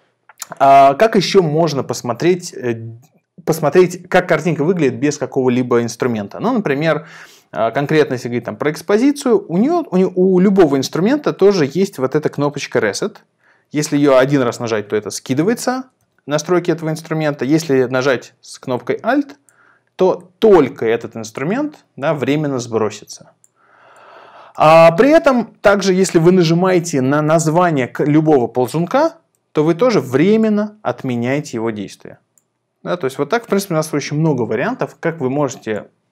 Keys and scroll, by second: 16.0 super+z.